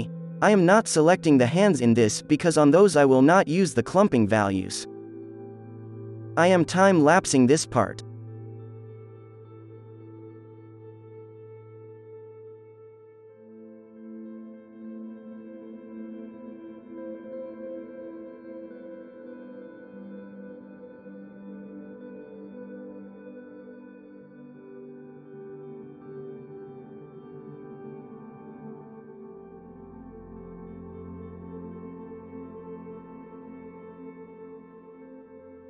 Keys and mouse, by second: 1.7 ctrl+z, 2.6 h, 3.6 ctrl+l, 3.9 alt+h, 4.7 h, 4.9-7.4 drag, 6.2 ctrl+l, 6.5 alt+h, 7.8-10.0 drag, 10.1 click, 10.8-12.4 drag, 12.4-14.0 drag, 14.2-15.5 drag, 15.6 Tab, 15.6 middle click, 15.8 ctrl+s, 16.2-19.3 drag, 19.4 middle click, 20.1-24.3 drag, 20.1 right click, 22.6 KP_0, 22.7 middle click, 23.9 right click, 24.3 middle click, 24.5-27.8 drag, 24.5 right click, 25.5 right click, 26.2-28.0 typing, 26.4-27.4 right drag, 26.8 middle click, 27.5 middle click, 27.5 right click, 29.5 f, 29.7 f, 29.8-30.8 middle drag, 29.9-31.7 drag, 29.9 right click, 30.3 f, 31.3 middle click, 31.3 right click, 31.5-33.0 typing, 32.1-35.6 drag, 34.2 middle click, 34.2-35.6 typing, 35.5 right click.